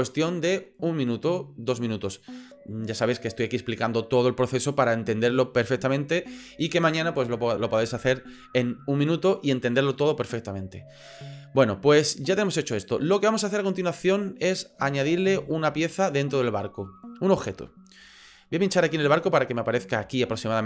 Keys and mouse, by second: 14.4 middle click, 15.0 shift+drag, 15.5-16.0 ctrl+middle drag, 16.3 ctrl+middle click, 17.0 middle click, 17.5 shift+middle click, 18.7 click.